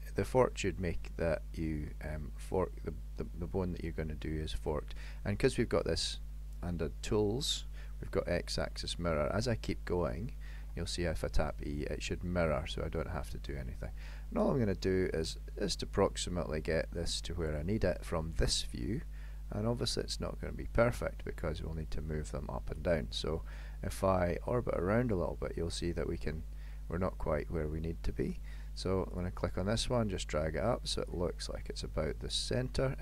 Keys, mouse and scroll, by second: 10.7 e, 15.7 shift+middle click, 17.9 e, 24.6 middle click, 29.2 click, 30.0 click, 31.4 middle click.